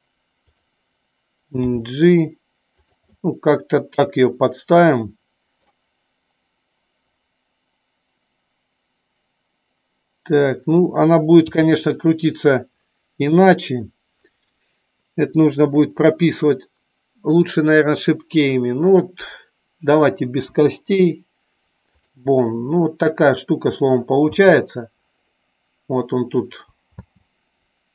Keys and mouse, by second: 0.5 click, 2.8 click, 3.3-5.7 middle drag, 11.5 KP_3.